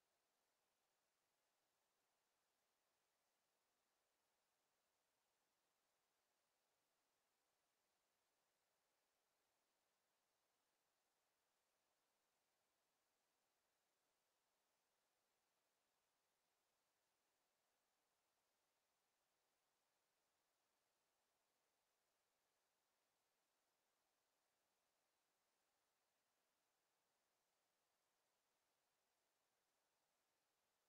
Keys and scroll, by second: 8.4-10.0 typing, 28.0 6, 28.4 0.